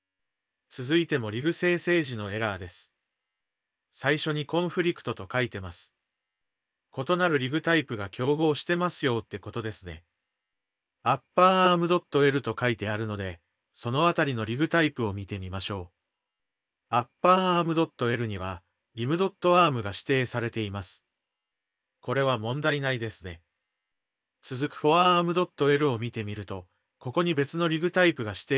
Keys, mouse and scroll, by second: 1.6-4.3 drag, 4.8-14.3 drag, 14.7 Tab, 17.2 click, 18.8 click.